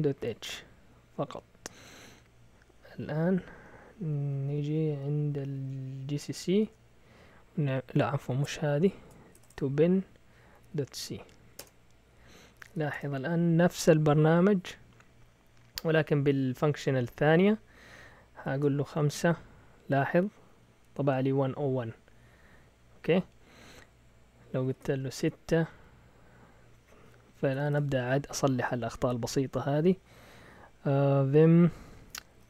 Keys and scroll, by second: 0.0-0.4 typing, 1.8-5.5 typing, 6.6 Return, 6.6 typing, 8.1 Up, 8.1-11.2 typing, 11.6 Return, 12.5-13.2 typing, 18.4 5, 18.5 Return, 24.7 BackSpace, 25.0 6, 25.1 Return, 27.2-28.1 typing, 32.1-32.4 typing.